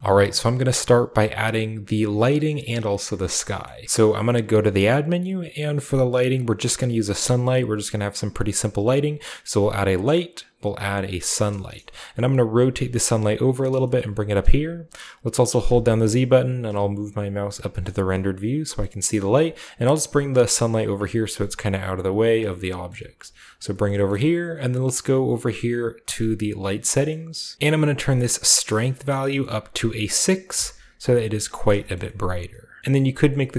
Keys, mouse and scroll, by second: 0.4-1.8 shift+middle drag, 2.4-4.8 shift+middle drag, 3.4-4.8 shift+scroll down 2, 4.5 shift+a, 10.9 click, 11.5 scroll down 2, 11.7-12.0 middle drag, 12.2 r, 12.9 click, 13.0-13.5 scroll down 1, 13.2 g, 13.6 shift+click, 14.0 g, 14.4-15.8 drag, 15.3-16.2 typing, 17.4 typing, 18.8-20.3 middle drag, 18.8-19.6 scroll down 1, 19.2 typing, 19.6-20.8 drag, 20.4 r, 20.9-24.9 drag, 21.5-23.2 typing, 22.2-22.8 scroll down 1, 22.8-24.3 scroll up 1, 24.0-25.7 shift+middle drag, 25.0-26.0 drag, 26.0 middle click, 26.4-27.5 shift+drag, 26.6 typing, 26.8 shift+middle click, 26.8-27.5 shift+scroll up 1, 29.1-30.3 drag, 30.5 6, 31.0 click, 31.4-31.7 scroll up 1, 31.8-32.8 shift+middle drag.